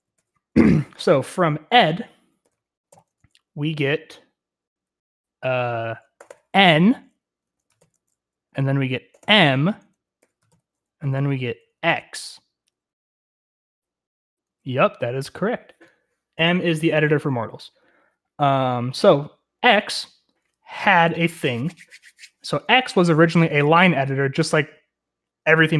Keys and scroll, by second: 0.0-0.6 typing, 2.4-3.0 typing, 5.9-11.5 typing.